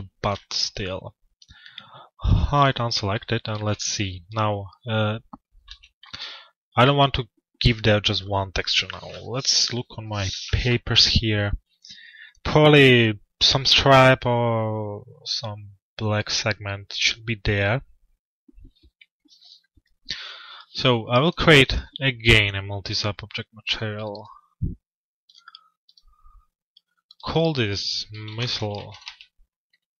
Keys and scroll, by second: 5.3 f, 6.0 z.